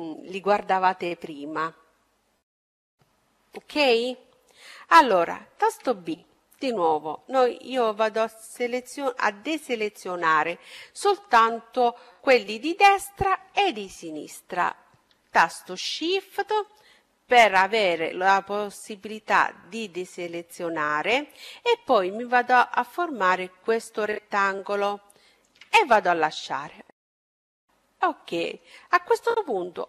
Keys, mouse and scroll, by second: 5.6 b, 26.8-29.8 middle drag.